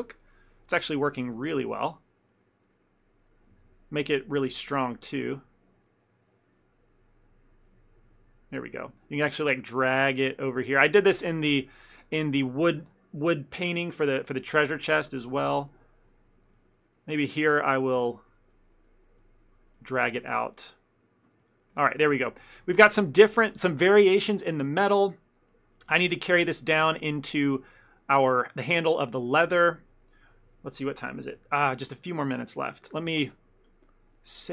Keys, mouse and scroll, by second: 0.0 click, 0.7 click, 0.7 middle click, 1.2 click, 1.5 click, 3.4 middle click, 3.4 click, 3.7 shift+f, 4.7 click, 5.2 click, 5.9 middle click, 6.3 click, 7.3 middle click, 7.8 click, 8.1 click, 8.8 shift+middle click, 9.5 click, 10.6 ctrl+middle click, 10.9 ctrl+middle click, 11.0 shift+middle click, 11.1 middle click, 11.4 shift+middle click, 12.1 ctrl+middle click, 12.6 shift+middle click, 14.6 ctrl+middle click, 14.8 shift+middle click, 15.1 middle click, 15.4 middle click, 15.6-16.2 shift+middle click, 15.9 shift+middle click, 16.2 middle click, 16.6 ctrl+middle click, 16.9 middle click, 17.4 click, 17.8 click, 18.2 ctrl+middle click, 18.6 click, 19.0 click, 19.6 click, 20.1 click, 20.8 click, 21.5 ctrl+middle click, 21.7 ctrl+middle click, 22.0 middle click, 22.2 ctrl+middle click, 22.6 shift+middle click, 22.7 shift+middle click, 22.9 middle click, 23.1 middle click, 25.5 ctrl+middle click, 25.6 ctrl+middle click, 26.0 shift+middle click, 26.3 middle click, 26.7 ctrl+middle click, 26.9 shift+middle click, 28.0 ctrl+middle click, 28.2 ctrl+middle click, 28.3 shift+middle click, 29.4 ctrl+middle click, 29.8 middle click, 30.0 shift+middle click, 30.1 shift+middle click, 31.4 ctrl+middle click, 31.9 shift+middle click, 32.1 middle click, 32.5 ctrl+middle click, 33.7 click.